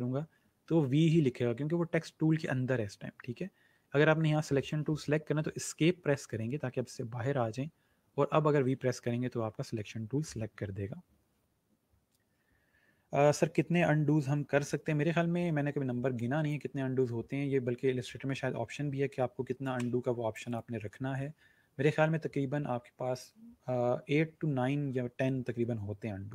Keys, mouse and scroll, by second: 3.2 ctrl+z, 8.5 v, 16.1 click, 19.6 shift+click.